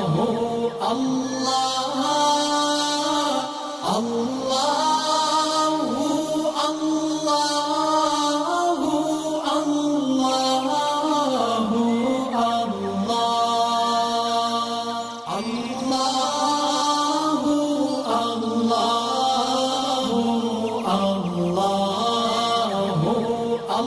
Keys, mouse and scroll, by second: 0.5 click, 3.2 alt+scroll down 1, 3.8 alt+scroll down 1, 4.1 space, 4.2 click, 4.5 alt+scroll up 1, 5.9 alt+scroll up 1, 6.2 space, 6.3 click, 6.8-14.0 shift+drag, 15.1 alt+scroll down 1, 15.9 alt+scroll up 1, 16.7 alt+scroll down 1, 17.5 alt+scroll up 1, 17.9 click, 20.7 click, 22.4 alt+scroll down 2, 22.7 click, 23.0-23.7 alt+scroll up 2, 23.7 click.